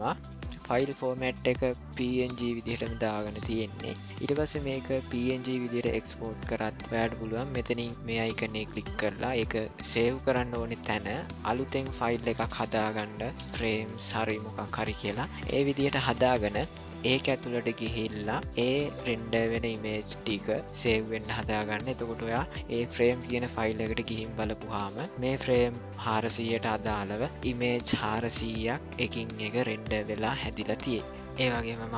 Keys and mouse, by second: 8.1 click.